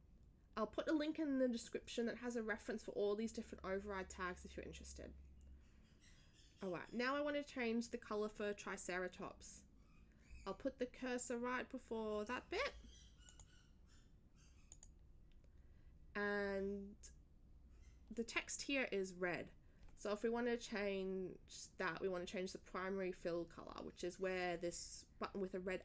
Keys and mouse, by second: 13.2 click, 14.7 click.